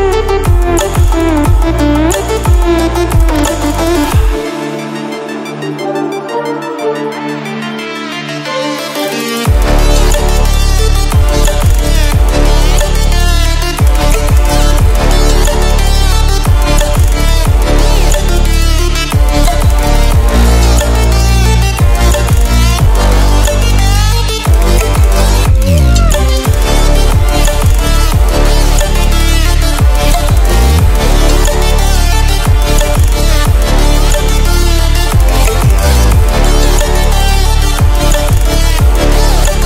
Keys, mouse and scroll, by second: 0.4-2.1 shift+drag, 38.9 click.